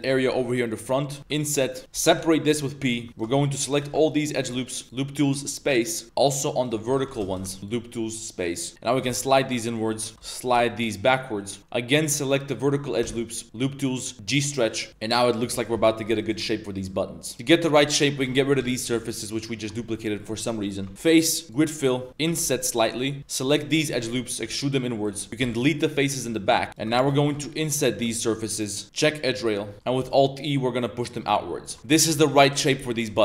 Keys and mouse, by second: 0.6 ctrl+shift+click, 1.2 i, 2.1 p, 3.0 Tab, 3.1 ctrl+z, 3.1 ctrl+click, 4.3 ctrl+click, 4.8 w, 6.0 2, 7.0 ctrl+z, 7.2 shift+click, 7.6 w, 8.7 g, 8.9 g, 10.4 g, 13.0 w, 15.2 1, 15.5 alt+click, 16.2 alt+click, 16.8 alt+shift+click, 17.3 Tab, 17.3 ctrl+z, 17.5 click, 18.2 g, 18.6 x, 18.9 z, 19.0 click, 20.8 Tab, 20.9 2, 21.0-21.5 drag, 22.2 i, 23.2 alt+shift+3, 23.5 alt+shift+click, 23.8 middle click, 24.4 e, 25.2 z, 25.4 x, 26.3 shift+middle drag, 26.6 z, 26.7 shift+middle click, 27.2 ctrl+shift+click, 27.4 click, 27.4 middle click, 27.9 1, 29.7 click, 29.7 middle click, 29.7 3, 30.1 alt+s, 32.1 shift+Tab, 32.2 shift+click, 32.2 shift+middle click, 32.3-32.7 drag, 32.3-32.7 middle drag, 32.9 click, 32.9 middle click.